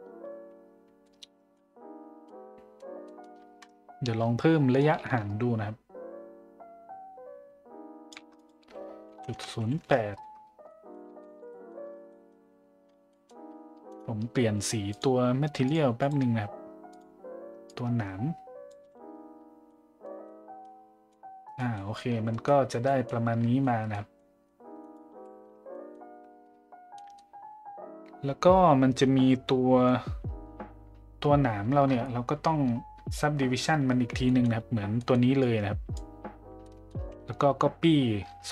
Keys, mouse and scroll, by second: 1.0-1.5 middle drag, 2.2-2.7 middle drag, 3.1 middle click, 4.8-8.1 shift+drag, 8.4-10.1 drag, 10.6 middle drag, 11.3 shift+z, 11.5 middle drag, 12.1 middle drag, 13.1 middle drag, 14.9 click, 15.7 click, 16.0 drag, 19.0 a, 19.7 middle drag, 20.2-20.6 middle drag, 21.1-21.5 middle drag, 21.7 middle drag, 22.4 middle drag, 22.8 middle drag, 23.6 middle drag, 24.1 middle drag, 25.7 middle click, 27.0 middle click, 34.2 middle click, 35.0 middle click, 35.4-36.0 drag, 36.6 middle click.